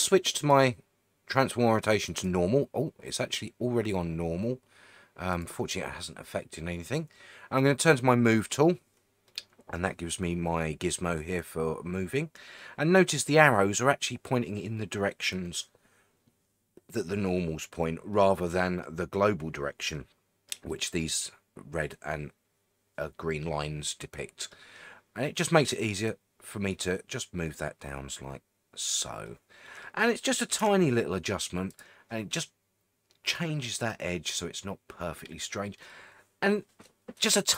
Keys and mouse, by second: 0.5-5.5 drag, 8.4 click, 9.3 middle click, 18.1 middle click, 19.9 middle click, 20.7 middle click, 23.9 middle click, 26.1-28.9 drag, 29.3 middle click, 30.6 Tab, 35.8-37.5 middle drag.